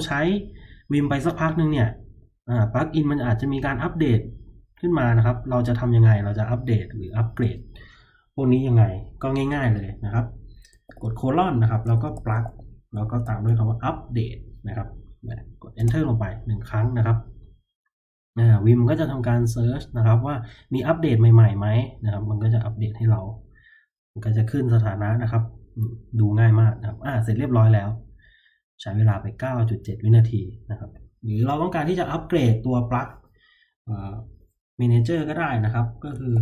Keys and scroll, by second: 2.2 typing, 10.8-14.2 typing, 15.7 Return, 36.3 shift+;.